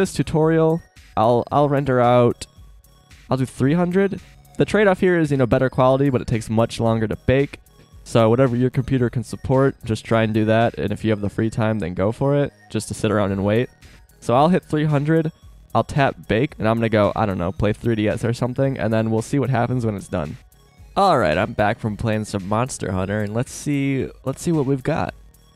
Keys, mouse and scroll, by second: 3.7 KP_0, 20.7 shift+scroll up 1.